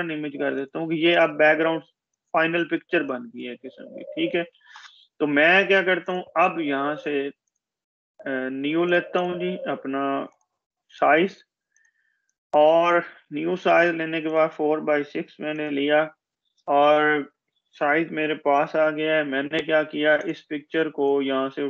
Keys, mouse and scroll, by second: 5.7 click, 18.2 ctrl+-, 19.9-21.6 drag.